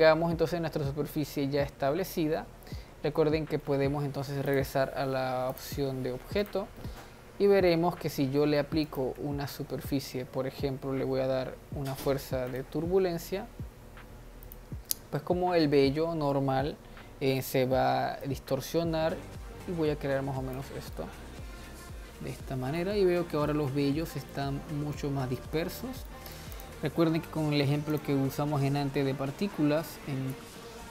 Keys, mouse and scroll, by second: 4.7-6.7 drag, 7.0-9.2 middle drag, 9.2 click, 9.4 shift+a, 13.4 g, 15.1-17.5 middle drag, 17.5 click, 18.6-21.2 drag, 21.2-23.4 middle drag, 23.4-23.8 scroll up 2, 23.8 middle click, 24.8-25.2 scroll up 2, 25.2-25.9 middle drag, 25.9-26.4 scroll down 1, 26.4 middle click, 26.9 click, 28.2 click, 28.8-30.9 scroll down 25.